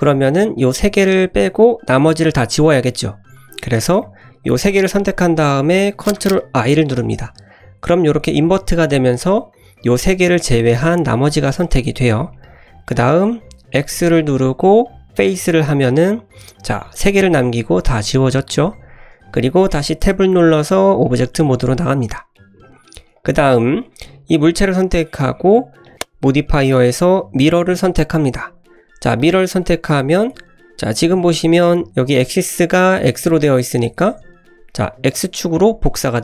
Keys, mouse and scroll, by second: 0.1 click, 0.6 click, 3.9 click, 4.4-4.7 drag, 6.5 ctrl+i, 8.4-9.4 middle drag, 11.2 middle drag, 12.3 middle click, 13.7 x, 15.2 typing, 15.8-16.5 middle drag, 16.8 click, 17.1-18.5 middle drag, 19.3 scroll down 1, 19.3 middle click, 20.0 Tab, 21.0 middle drag, 21.4 shift+middle click, 21.8-22.3 scroll up 2, 22.3 middle click, 23.1 click, 23.4-23.7 scroll down 2, 23.7-24.3 drag, 25.8 click, 26.6-29.3 drag, 30.0-30.7 middle drag, 30.8-31.9 scroll up 2, 33.7 scroll down 2, 34.0 shift+middle click, 34.9 click, 35.5 click.